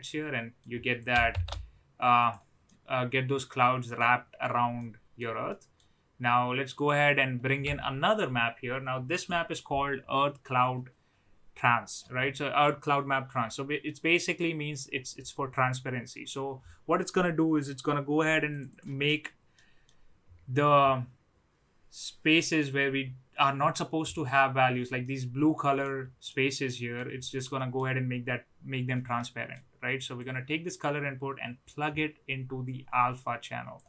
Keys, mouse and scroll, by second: 0.0-0.5 middle drag, 0.9 click, 1.2 shift+d, 2.6-3.9 middle drag, 4.7-5.1 middle drag, 5.5 middle click, 6.7 click, 19.7 middle click, 25.0-25.8 middle drag, 26.2-26.9 middle drag, 27.5 middle click, 29.3 middle click, 30.2-33.8 drag.